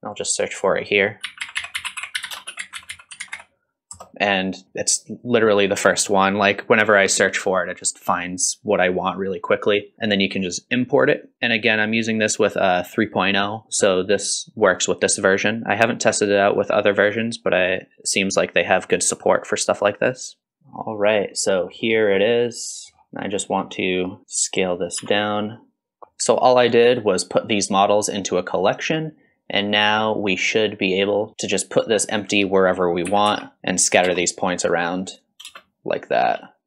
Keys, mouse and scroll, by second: 19.3-20.4 drag, 20.4 scroll down 11, 20.6-21.9 scroll down 6, 22.2-26.0 middle drag, 26.0-26.4 scroll up 2, 26.6-29.9 middle drag, 30.1 middle click, 30.5-34.2 middle drag.